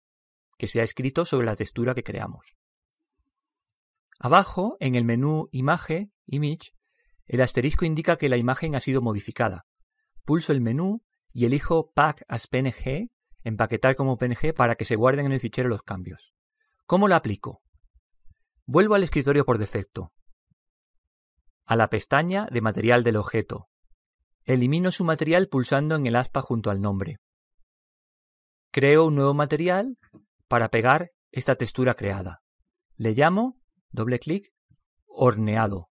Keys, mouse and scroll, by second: 20.3 click, 22.3 click, 25.9 click, 29.8 click, 33.5 click.